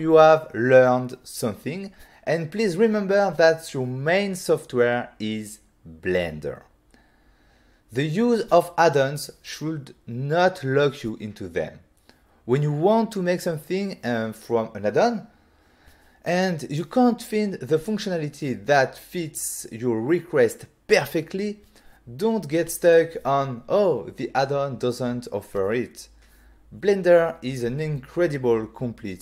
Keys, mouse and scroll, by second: 1.1 click, 1.1 click, 2.3 typing, 4.1 click, 5.4 ctrl+space, 6.1 ctrl+middle click, 7.1 shift+middle click, 7.7 click, 14.3 middle click, 14.5 click, 15.2 right click, 15.8 click, 16.6 click, 18.4 click, 18.7 click, 19.7 click, 19.8 click, 20.9 shift+click, 22.0 Return, 22.6 shift+click, 23.5 shift+click, 24.7 click, 25.1 click, 25.9 click, 27.1 click.